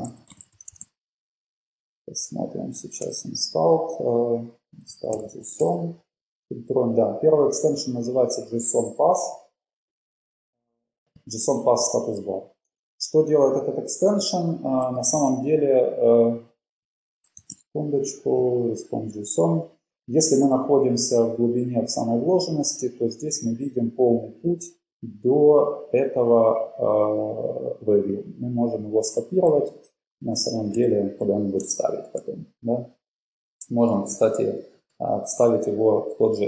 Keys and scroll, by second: 0.0-1.4 typing, 3.2 Return, 4.7-5.9 typing, 15.3 super+w, 17.5 shift+super+e, 32.6 shift+Left, 32.9 super+v, 33.1 shift+Left, 33.3 typing.